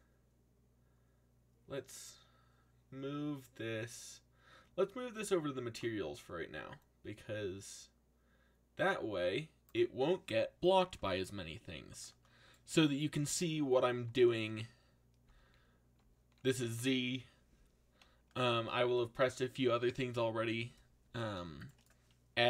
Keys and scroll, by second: 14.0 z, 15.2 z, 15.9 z.